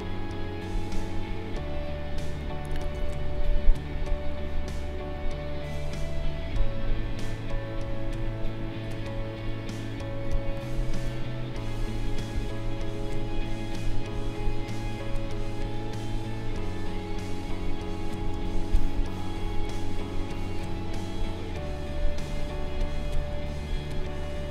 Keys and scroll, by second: 2.9 ctrl+z, 10.3 space, 18.3 space.